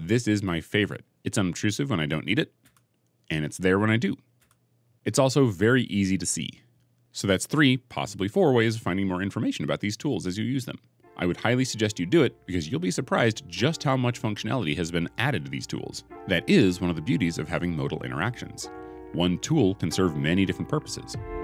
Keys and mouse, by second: 1.1 h, 2.5 h, 4.3 h.